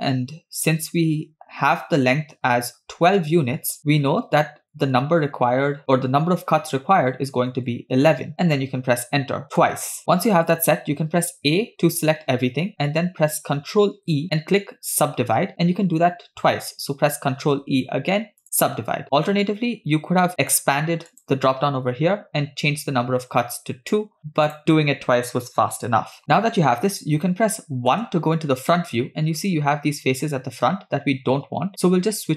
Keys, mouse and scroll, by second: 11.6 a, 14.0 ctrl+e, 17.4 ctrl+e, 20.3 click, 22.0 click, 24.8 click, 27.9 KP_1, 29.5-30.7 scroll up 3.